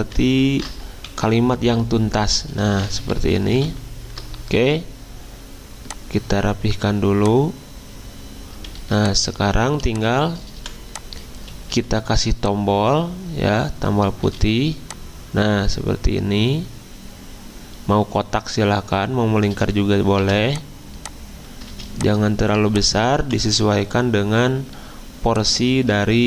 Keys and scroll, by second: 0.6 ctrl+Delete, 3.2 ctrl+a, 3.6 alt+Up, 8.8 z, 9.8 v, 11.7 m, 14.2 a, 20.2 v, 21.7 z, 23.2 v.